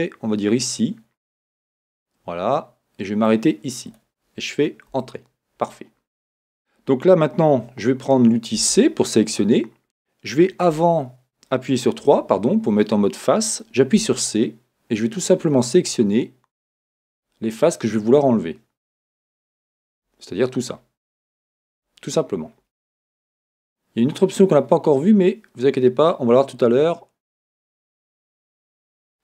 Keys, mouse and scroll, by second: 5.0 Return, 8.6 c, 10.9 Escape, 12.0 3, 14.0-18.0 middle drag, 14.0 c.